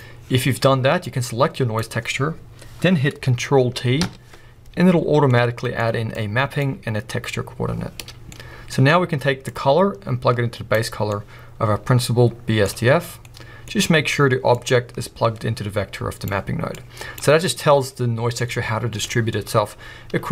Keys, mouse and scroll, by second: 0.0-5.4 drag, 4.0 ctrl+t, 5.4-9.5 middle drag, 9.5-10.7 drag, 11.3-14.6 middle drag, 14.6-16.3 drag, 17.0-20.3 drag.